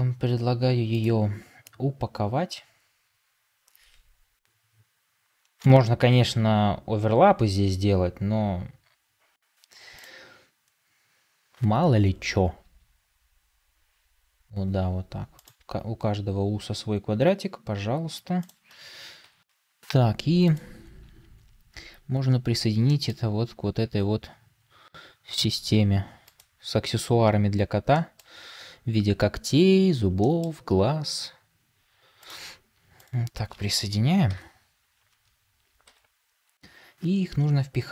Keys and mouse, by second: 1.5-10.1 drag, 12.5 s, 17.7 g, 19.1 Tab, 23.7 g, 28.0 shift+middle click, 30.1-30.4 shift+middle drag, 34.2 ctrl+j, 35.8 Tab.